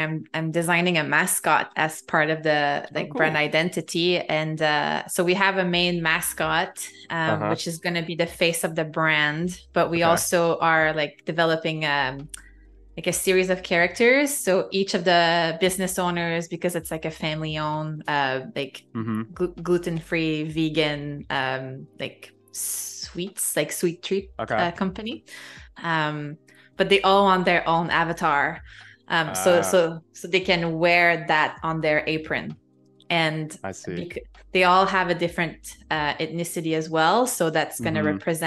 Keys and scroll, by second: 7.8 z, 10.5 super+z, 10.9 a, 13.2 super+[, 13.5 i, 14.6 a, 15.7 i, 16.3 a, 17.3 space, 21.6 space, 30.1 shift+b, 30.7 space, 32.3 ], 37.3 super+z.